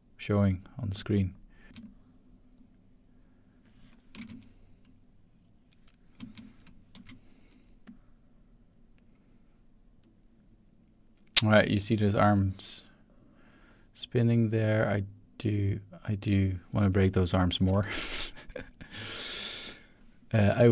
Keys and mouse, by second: 0.9 click, 1.7 space, 1.8-4.0 drag, 4.2 space, 6.1 space, 6.9 ctrl+s, 7.8-16.5 drag, 17.8 shift+z, 19.0-19.4 typing, 19.6 click.